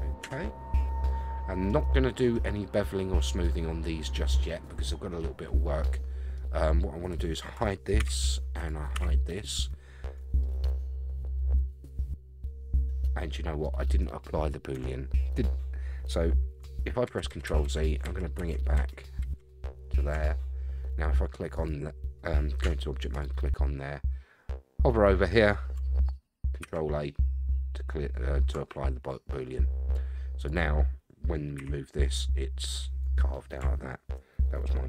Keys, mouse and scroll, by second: 0.2 Tab, 1.0-1.7 middle drag, 4.4-6.3 middle drag, 6.5-7.1 scroll down 4, 7.1 click, 8.0 h, 8.6 click, 8.9 h, 8.9 y, 9.3 click, 10.4-13.6 middle drag, 14.7 Tab, 17.1 ctrl+z, 17.3 ctrl+z, 17.5 ctrl+z, 17.6 ctrl+z, 18.0 ctrl+z, 18.4 ctrl+z, 18.8 ctrl+z, 20.1 ctrl+z, 21.5 click, 22.6 Tab, 23.1 click, 26.6 ctrl+a, 30.4 click, 31.6 g.